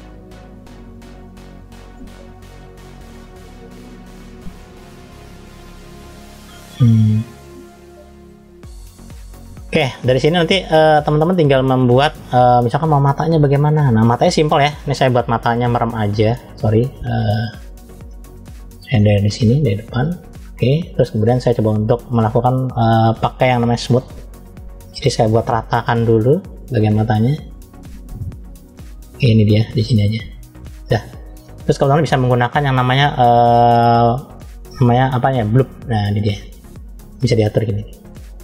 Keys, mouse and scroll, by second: 0.0 click, 5.8-7.0 middle drag, 7.0-7.3 scroll down 3, 7.6 middle click, 8.6-8.9 scroll up 2, 9.3 middle click, 10.5-11.0 scroll down 2, 11.0 shift+middle click, 13.0-13.6 scroll up 2, 15.4 f, 18.8 shift+middle click, 19.5-20.7 middle drag, 20.9-21.8 scroll up 2, 21.9-22.3 scroll down 1, 23.6 click, 25.4 f, 26.9 click, 35.4 click, 37.9 click, 38.3 click.